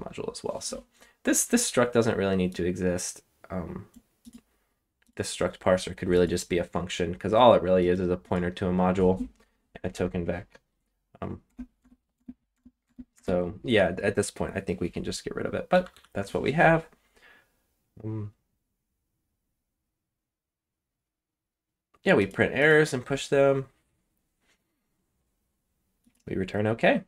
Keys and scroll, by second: 9.9 k, 11.4-13.1 typing, 15.7 j, 15.9 j.